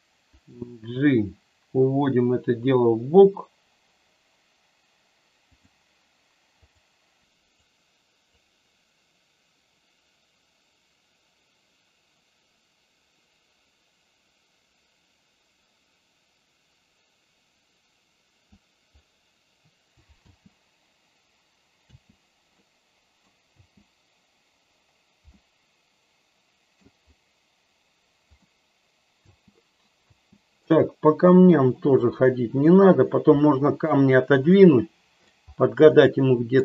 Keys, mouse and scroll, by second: 0.5 g, 5.5 click, 7.1 g, 7.2 click, 8.2-18.5 drag, 20.1 space, 21.9 space, 22.5 middle click, 23.5 space, 25.3-26.7 middle drag, 28.2 middle click, 30.0 space, 31.2 middle click, 34.5 middle click, 35.8 middle click.